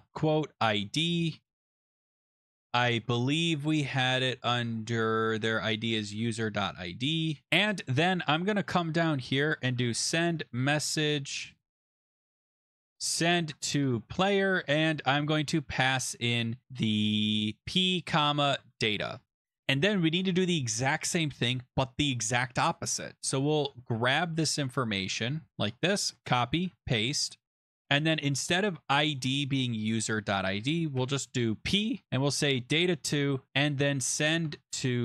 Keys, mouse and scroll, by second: 0.0-3.0 typing, 4.1 middle click, 5.6-7.5 typing, 7.4 click, 7.8 Return, 9.4-13.9 typing, 17.3-19.1 typing, 19.6 Return, 19.7 Return, 25.5 click, 25.9 ctrl+c, 26.5 click, 26.7 ctrl+v, 28.7 click, 29.2 click, 30.1 shift+click, 30.1 shift+click, 31.0 p, 32.0 click, 32.3 2, 32.9 click, 33.4-35.0 typing.